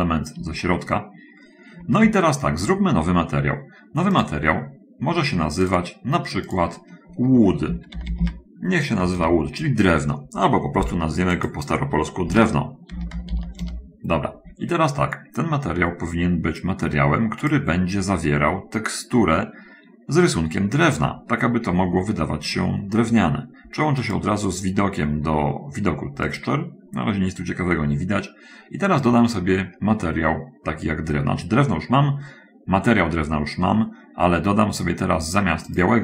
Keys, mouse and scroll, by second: 0.2 g, 0.4 Escape, 2.6 shift+middle click, 4.6 click, 6.1 click, 6.7 click, 7.9 w, 8.4 o, 8.6 d, 9.4 Return, 11.8 click, 12.4-13.9 typing, 13.9 Return, 16.9-18.1 drag, 21.4-22.9 middle drag, 26.7 click.